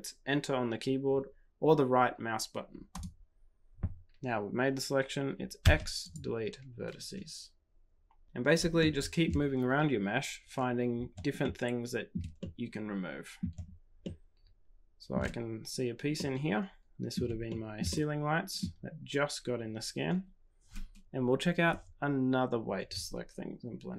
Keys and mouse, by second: 5.6 x, 8.2 typing, 8.7 shift+middle click, 11.4 shift+middle click, 12.3-13.4 middle drag, 14.0-15.1 shift+middle drag, 16.1-17.1 middle drag, 17.4 shift+click, 17.8 click.